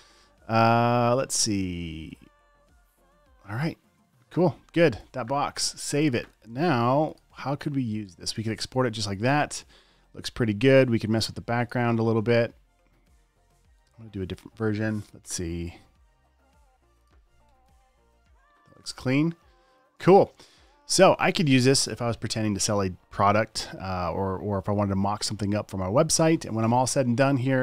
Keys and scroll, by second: 5.3 super+s, 8.2 space, 8.7 alt+super+space, 10.0 space, 17.8 alt+BackSpace, 18.0 v, 18.8 space, 19.3 alt+super+space, 20.3 super+space.